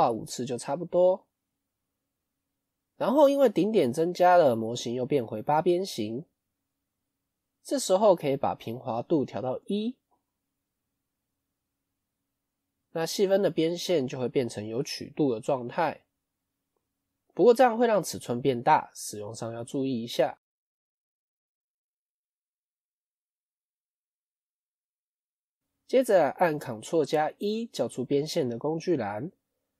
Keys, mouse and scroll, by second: 1.1-2.4 middle drag, 2.4 scroll down 3, 2.5-3.6 middle drag, 3.6 click, 4.2-5.9 middle drag, 5.9 scroll up 1, 6.4-8.0 middle drag, 8.0-10.0 drag, 10.0-15.7 middle drag, 16.2 Tab, 23.7 Tab, 24.1-25.3 middle drag, 25.3 KP_1.